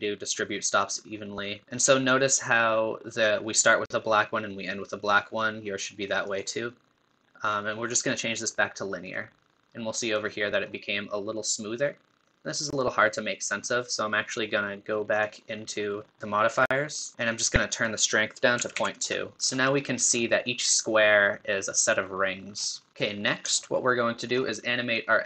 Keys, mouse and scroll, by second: 6.3-9.3 drag, 10.2-14.1 middle drag, 15.2-17.1 drag, 17.7-19.4 drag, 19.4 middle click, 19.5-19.9 scroll up 5, 19.9-22.5 middle drag, 22.5-22.8 scroll down 2, 22.8-25.2 middle drag.